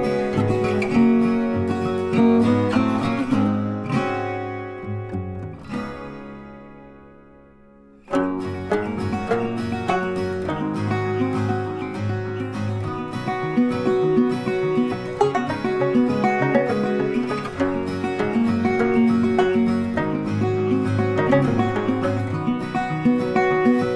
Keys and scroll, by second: 9.1 ctrl+t.